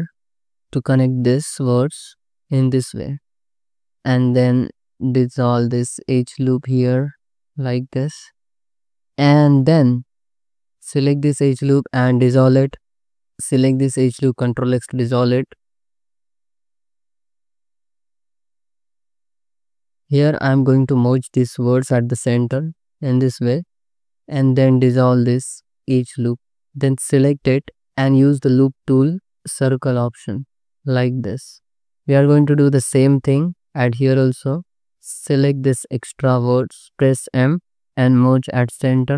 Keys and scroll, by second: 1.0 space, 2.5 space, 3.8 c, 4.2 2, 6.2 ctrl+shift+x, 7.0 Tab, 7.8 Tab, 8.2 2, 10.1 3, 10.2 2, 12.0 ctrl+shift+x, 12.7 3, 13.1 1, 13.4 2, 14.3 ctrl+shift+x, 16.7 ctrl+x, 17.6 ctrl+shift+x, 18.1 c, 19.7 c, 20.2 1, 22.3 m, 24.3 2, 26.3 ctrl+x, 26.7 3, 34.0 1, 37.9 m.